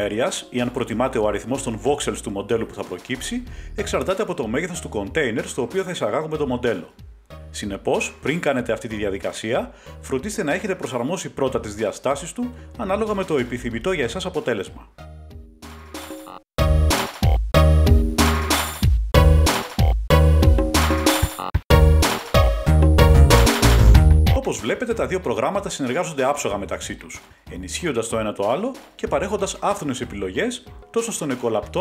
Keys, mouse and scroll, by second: 1.7 click, 4.0 scroll down 1, 6.0-8.1 middle drag, 7.1 Tab, 10.1-11.5 drag, 10.9-11.5 typing, 12.4-12.8 scroll, 14.7-15.1 scroll, 16.2 click, 16.3 typing, 16.5 click, 17.7-18.2 scroll down 1, 18.2 scroll down 1, 18.3 click, 19.7 click, 23.8 click, 25.2 click, 25.9 ctrl+Tab, 28.5 click, 29.2 g, 31.5 click.